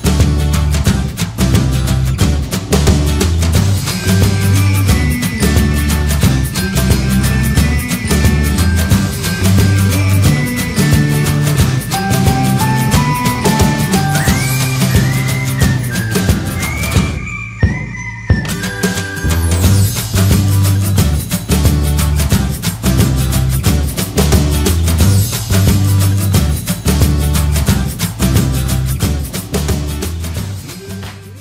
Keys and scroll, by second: 2.2 super+0, 5.2 super+t, 6.7 super+j, 7.1 super+space, 8.7 super+t, 10.0 super+j, 10.1 super+t, 10.8 super+j, 11.3 super+0, 11.9 super+g, 17.2 super+j, 19.3 super+space, 24.1 alt+shift+super+e, 26.4 super+space.